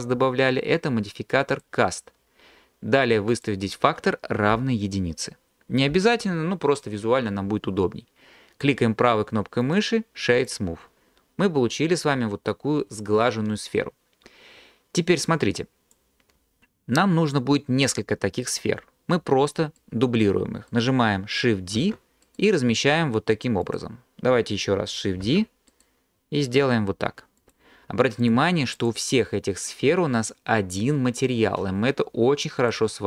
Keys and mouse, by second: 3.5-5.9 drag, 9.8-10.5 drag, 21.8 shift+d, 25.2 shift+d, 25.7 drag, 27.4 click, 28.8 click.